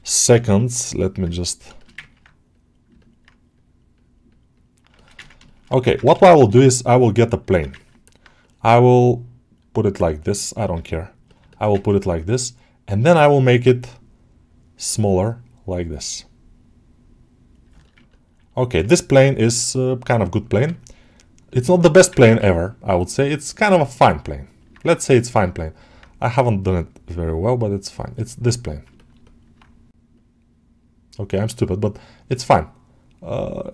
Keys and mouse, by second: 1.6 shift+middle click, 1.9 ctrl+alt+middle click, 2.4 click, 2.9 middle click, 3.8 click, 4.8 alt+shift+middle click, 5.1 ctrl+middle click, 5.3 alt+shift+middle click, 5.8 ctrl+Tab, 6.1 shift+a, 7.6 ctrl+alt+middle click, 7.9 middle click, 11.1 click, 11.3 alt+shift+middle click, 11.6 ctrl+alt+middle click, 14.6-17.5 drag, 17.6 middle click, 17.9 ctrl+middle click, 18.4 alt+middle click, 21.3 click, 22.2 ctrl+z, 22.5 click, 23.6 middle click, 25.4 alt+middle click, 26.4-27.9 drag, 28.0 alt+middle click, 28.8 ctrl+alt+middle click, 29.1 alt+middle click, 32.2 click.